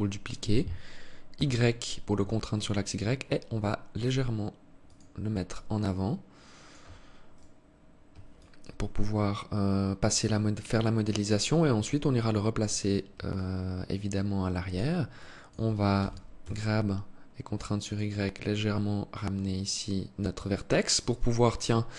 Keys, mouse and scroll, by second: 5.0 alt+click, 6.9 right click, 7.9 alt+click, 12.1 scroll up 2, 12.8 alt+click, 14.7 alt+click, 15.5 g, 17.7 alt+click.